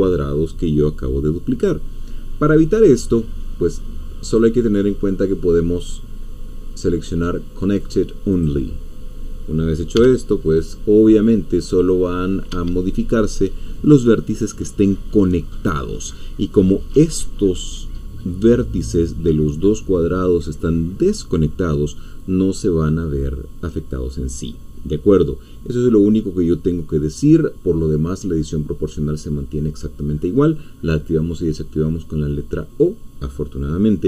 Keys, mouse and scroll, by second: 4.2 click, 8.3 click, 9.9 g, 12.5 Escape.